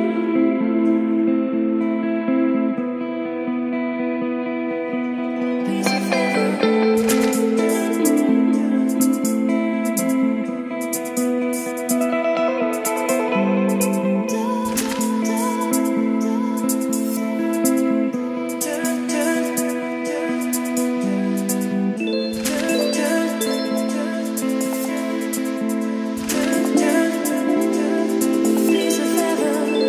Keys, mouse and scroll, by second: 0.1 click, 0.4 Return, 1.1-5.8 typing, 2.1 Return, 2.8 click, 3.7 click, 5.4 click, 6.4 Right, 6.7 Left, 6.8 Return, 7.6 Return, 7.8-12.3 typing, 10.4 click, 12.2 click, 12.4 Return, 12.9 click, 13.8 Return, 14.3-16.1 typing, 16.0-17.5 drag, 17.3-18.7 typing, 18.8 click, 19.1 middle click, 19.8 Return, 20.5-26.8 typing, 21.6 ctrl+space, 21.8 Return, 27.0 Return, 27.9-29.8 typing.